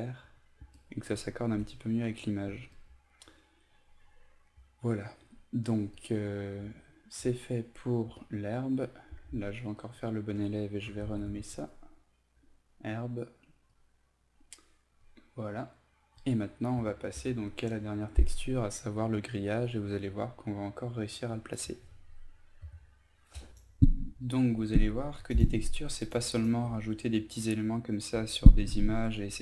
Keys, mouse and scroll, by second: 1.6 ctrl+space, 2.1 typing, 5.3 typing, 6.0 click, 8.2 shift+click, 9.2 ctrl+g, 9.8 click, 10.7-11.9 typing, 13.7 click, 22.2 F9, 23.5-29.4 drag.